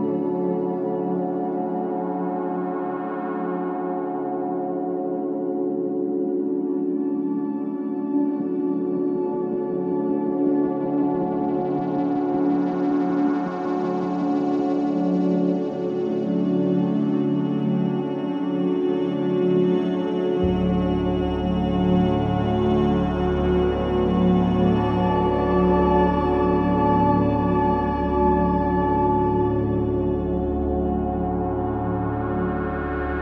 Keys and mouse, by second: 0.5 z, 1.1 click, 4.0-6.0 drag, 6.2 s, 12.1-16.4 drag, 12.5 g, 16.4 Tab, 19.5 ctrl+r, 20.4-22.1 drag, 22.5-23.7 drag, 22.8 x, 24.3 Tab, 31.5 Tab.